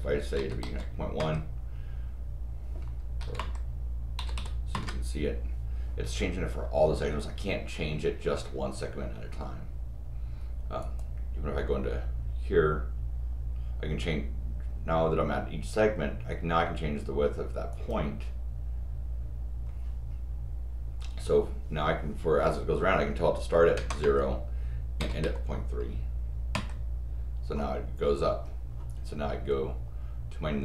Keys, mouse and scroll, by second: 10.8 click, 17.7 click.